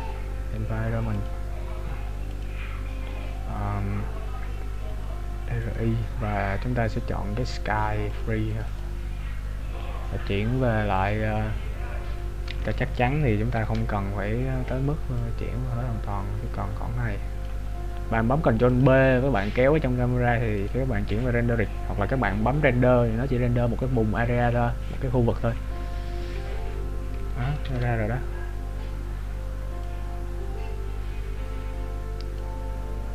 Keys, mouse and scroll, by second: 8.6 click, 12.4 scroll up 1, 13.0-13.5 scroll up 1, 13.5 ctrl+b, 18.6 click, 28.0 ctrl+b.